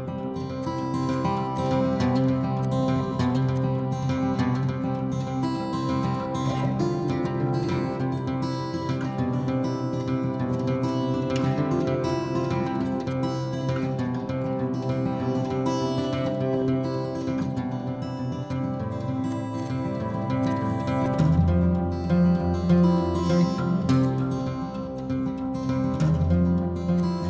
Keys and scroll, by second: 0.1 m, 1.5 m, 4.7 l, 6.2 space, 6.8 m, 8.0-10.4 typing, 8.8 Return, 12.0 p, 13.4 Escape, 18.2 r, 19.4 space, 20.3 ctrl+g, 21.0-22.7 typing, 23.9 m, 24.9-25.7 typing, 26.8 p.